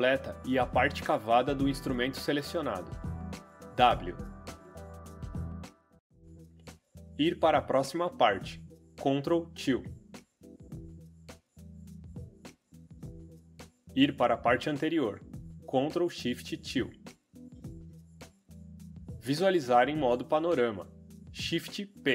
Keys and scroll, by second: 2.7 w, 5.1 w, 8.7 ctrl+', 10.1 ctrl+', 16.1 ctrl+shift+', 20.6 shift+p.